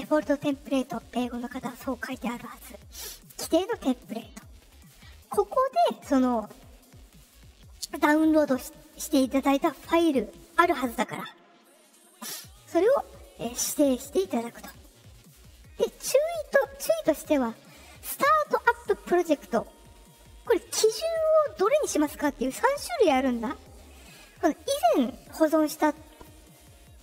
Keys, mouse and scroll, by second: 5.7 click, 14.3 click, 21.4 click, 21.9 click.